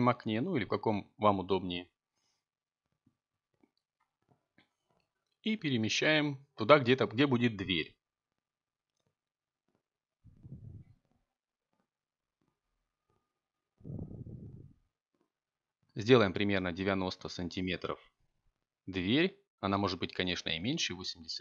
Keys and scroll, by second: 17.1 a.